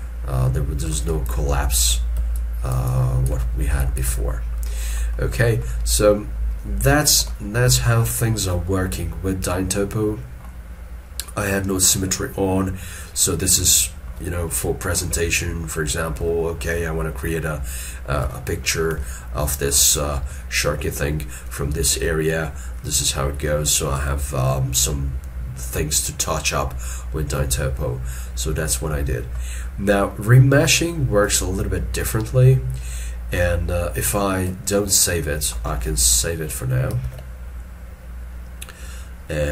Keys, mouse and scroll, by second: 0.5 scroll down 1, 1.3 shift+click, 2.4 shift+click, 2.9 shift+click, 3.9 shift+click, 4.4 scroll down 1, 4.8 middle click, 8.3 shift+middle click, 8.7 shift+middle click, 11.9 middle click, 14.4 middle click, 16.3 shift+middle click, 18.3 shift+middle click, 19.1 ctrl+middle click, 20.0 shift+middle click, 28.9 middle click, 34.9 ctrl+middle click, 37.0 ctrl+shift+s.